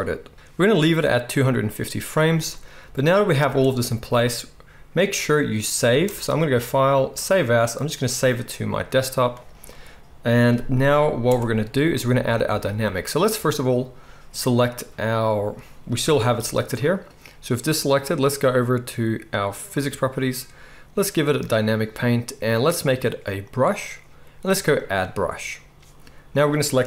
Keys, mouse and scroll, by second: 0.3 space, 3.4 space, 5.9 space, 7.8 space, 11.2 n, 16.0 g, 19.8-21.3 middle drag, 21.3-26.3 drag, 26.3-26.8 middle drag.